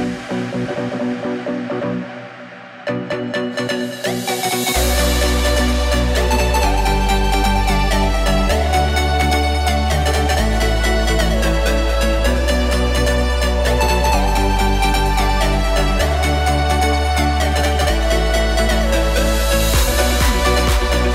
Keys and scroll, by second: 0.1 alt+3, 2.8 alt+|, 3.6 alt+|.